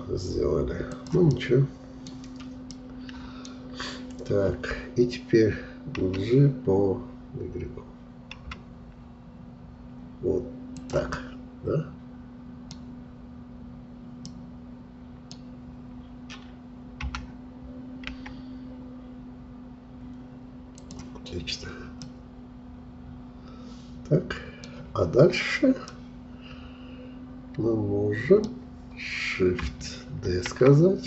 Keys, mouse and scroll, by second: 1.3 middle click, 2.1-2.7 scroll down 2, 2.7 middle click, 3.4-6.0 scroll down 2, 6.0 g, 11.1-13.0 middle drag, 13.0-14.2 scroll up 3, 14.2-17.0 middle drag, 17.0 g, 21.2-21.7 scroll down 2, 22.0-25.0 middle drag, 25.9-28.9 middle drag, 30.3 shift+d.